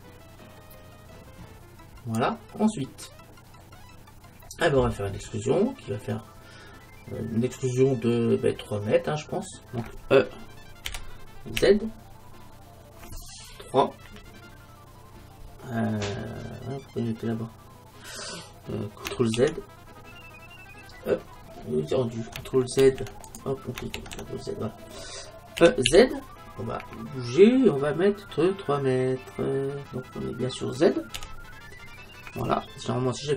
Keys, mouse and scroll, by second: 2.8-6.8 middle drag, 10.9 e, 24.0 ctrl+z, 25.7 e, 27.5 e.